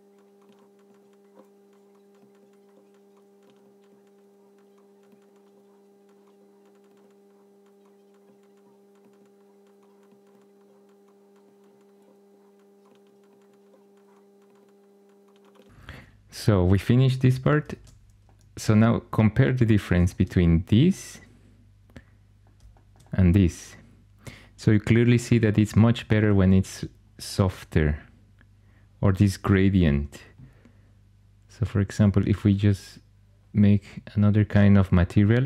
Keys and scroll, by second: 17.6 shift+super+e.